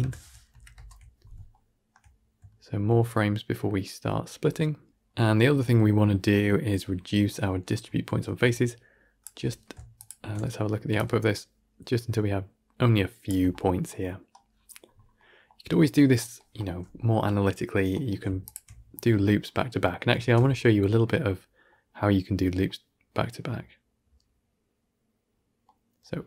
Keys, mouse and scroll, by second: 0.4 shift+Left, 0.6 shift+space, 1.4-4.9 shift+middle drag, 4.9-9.9 drag, 11.0-18.4 shift+drag, 20.0 shift+space, 21.1-25.2 middle drag, 25.5-26.2 middle drag.